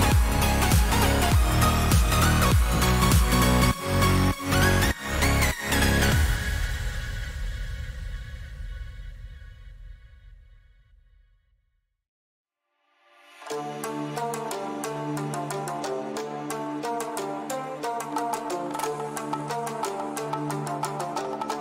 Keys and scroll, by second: 5.6 ctrl+j, 13.4 Return.